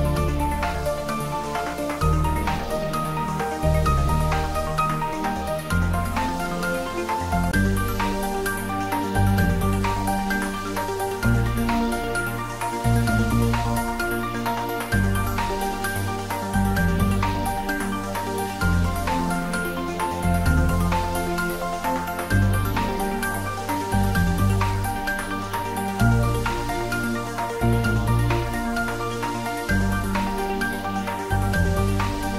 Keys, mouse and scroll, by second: 0.6 scroll up 1, 1.3 shift+z, 2.4 g, 3.4 click, 4.2 s, 5.9 click, 7.1 scroll up 1, 7.6-8.3 middle click, 8.5 click, 12.0 g, 12.4 x, 13.3 click, 13.9 click, 15.4 Tab, 17.0 click, 18.5 3, 18.7 click, 21.4-22.0 middle click, 22.4 shift+z, 24.3 click, 24.5 Tab, 25.0 click, 25.9 3, 26.1 click, 27.4 z, 29.0 click, 29.4 ctrl+z, 30.7 middle click, 31.8-32.3 shift+drag.